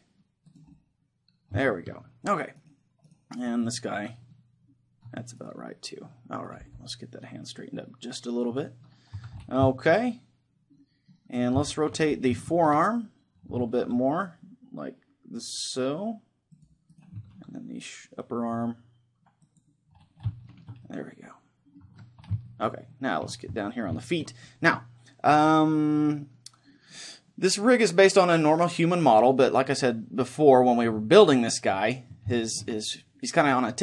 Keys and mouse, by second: 0.6-2.3 drag, 0.7-2.1 middle drag, 2.3-3.6 middle drag, 2.6-5.0 right drag, 3.8-5.1 middle drag, 5.4-6.4 middle drag, 6.7 g, 7.4 right click, 8.6-10.3 drag, 9.2 a, 9.7-12.9 middle drag, 11.4-13.4 right drag, 13.4-15.5 middle drag, 13.8 ctrl+r, 16.7-18.9 drag, 16.9-18.9 right drag, 17.3 ctrl+r, 19.6-21.3 drag, 20.5-21.9 middle drag, 21.9 a, 22.3-26.5 middle drag, 31.8-33.8 middle drag.